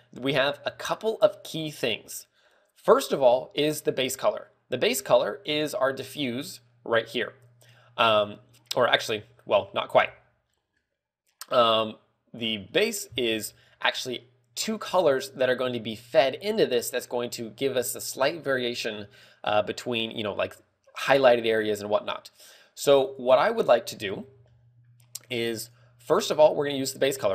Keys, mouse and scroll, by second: 9.6-10.0 scroll down 4, 10.4-10.9 scroll up 4, 10.8 middle click, 14.9 scroll up 3, 26.0 middle click.